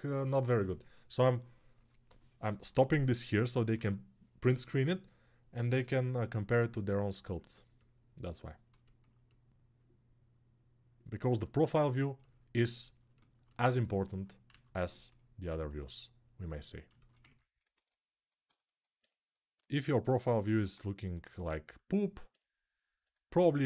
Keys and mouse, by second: 14.5 alt+q, 17.7 alt+q.